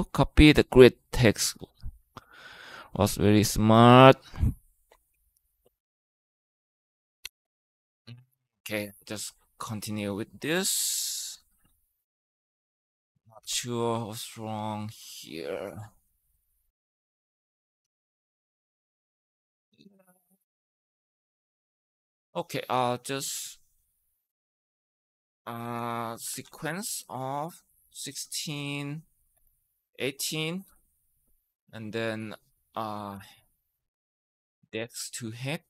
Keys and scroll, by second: 13.2 Return, 13.7 Up, 17.6 Return, 18.1 Up, 18.5 Right, 19.0 Right, 19.1 Right, 19.2 Right, 19.4 Right, 19.6 Right, 25.4-30.5 typing, 32.9-35.1 typing, 35.6 Down.